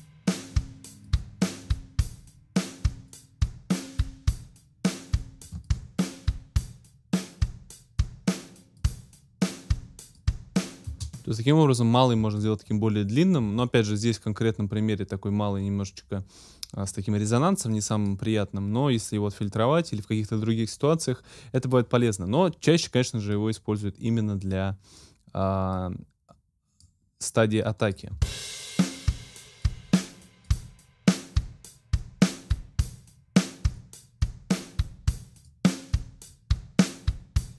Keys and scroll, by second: 10.9 space, 28.1 space.